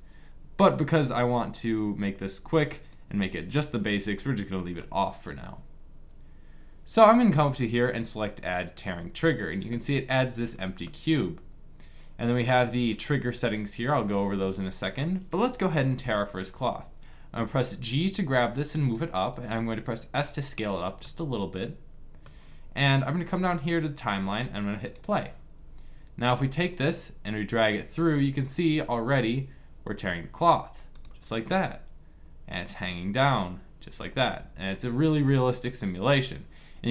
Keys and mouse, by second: 4.3 middle click, 9.3 click, 12.6-14.5 drag, 15.6 g, 19.2 s, 20.7 click, 25.9 g, 31.1-32.9 middle drag, 34.0 g.